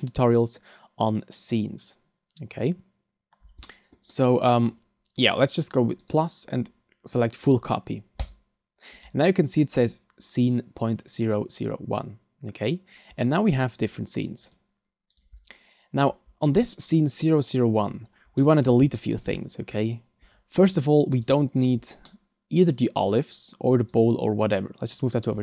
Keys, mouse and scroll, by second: 4.1 middle click, 4.7 middle click, 6.0 click, 13.2 click, 14.4 click, 17.9-18.4 scroll down 3, 18.4 middle click, 19.0 shift+middle click, 19.7 scroll up 3, 21.2 right click, 22.0 middle click, 22.9 scroll up 1, 23.9 click.